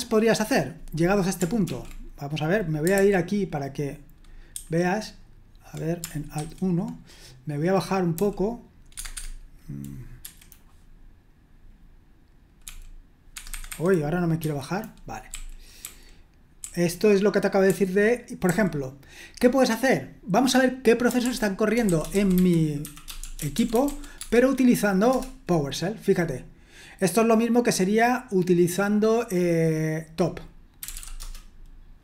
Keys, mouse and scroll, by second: 1.7 ctrl+l, 2.9 super+h, 4.5 super+1, 6.4 alt+1, 8.2 typing, 8.9 Escape, 9.0 Tab, 9.1 Escape, 9.2 Tab, 10.2 F6, 13.3 Escape, 13.5 Escape, 13.7 Escape, 14.4 F6, 15.3-16.6 typing, 17.6-18.5 typing, 21.2 super+l, 21.7-24.3 typing, 25.1 Return, 30.6-31.4 typing.